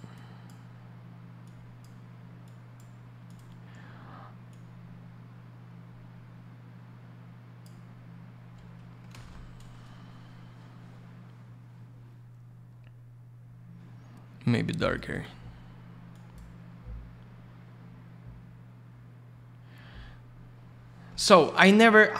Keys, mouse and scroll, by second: 1.4 click, 2.4 click, 3.2 click, 3.3 click, 4.5 click, 9.0 middle click, 9.1 alt+middle click, 9.2 alt+shift+й, 12.5 scroll up 1, 14.8 click, 15.1 click, 15.2 click, 16.1 click, 20.2 scroll down 1, 20.4 scroll up 1, 21.1 middle click, 21.8 scroll up 1.